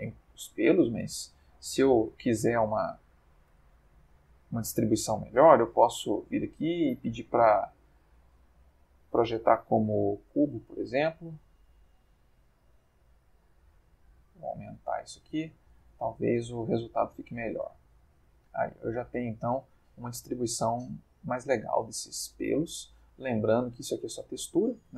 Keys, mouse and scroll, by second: 1.5 click, 2.4 ctrl+middle click, 6.0 u, 10.3 click, 11.3 s, 12.1 a, 12.5 s, 15.0 click, 15.7 Tab, 17.5 click, 18.3-19.3 middle drag, 19.4-20.9 ctrl+middle drag, 21.1-21.9 middle drag, 22.0-23.0 middle drag, 23.0-24.9 middle drag.